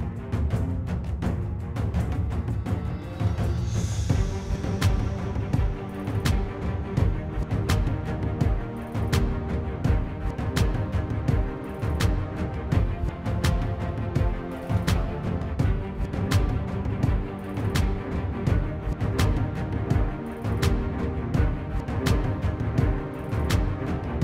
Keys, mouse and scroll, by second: 0.7 middle click, 2.8 middle click, 3.2 middle click, 6.2 middle click, 10.2 middle click, 11.3 middle click, 14.0 middle click, 14.7 middle click, 15.0 middle click, 16.2 middle click, 17.6 middle click, 18.7 middle click, 23.7 middle click.